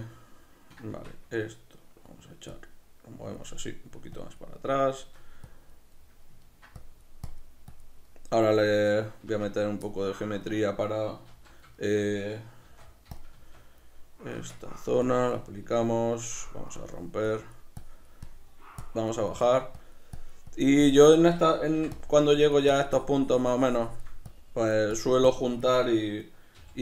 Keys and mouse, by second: 0.9 Tab, 2.0 middle click, 2.5 click, 4.6 middle click, 5.5 click, 6.0 middle click, 6.8 click, 8.0 middle click, 8.6 click, 8.9 middle click, 9.3 b, 9.4 Tab, 9.9 middle click, 11.3 alt+q, 11.7-13.3 shift+middle drag, 12.7 shift+d, 13.3 Tab, 14.5 Tab, 15.0 click, 15.6 Tab, 15.8 b, 16.7 click, 22.0 click.